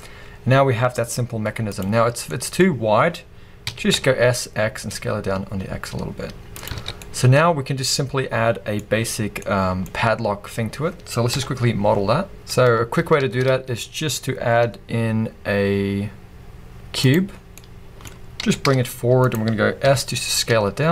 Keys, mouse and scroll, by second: 1.1-1.7 scroll up 2, 1.7 click, 1.8-6.6 middle drag, 2.6-3.7 scroll up 2, 3.7 s, 6.6 click, 6.7 alt+a, 6.8 scroll down 2, 7.0-11.3 middle drag, 9.0-9.4 scroll up 2, 9.8-11.3 scroll up 2, 11.3 KP_1, 12.7-13.2 scroll down 2, 13.2 shift+a, 17.2-19.3 middle drag, 17.3 scroll down 2, 18.4 g, 19.3-19.8 drag, 19.8 s.